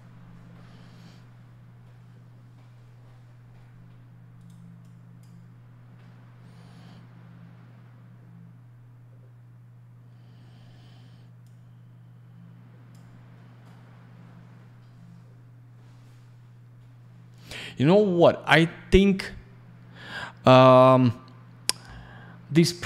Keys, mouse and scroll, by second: 4.4 right click, 4.4 right click, 4.8 click, 11.4 click.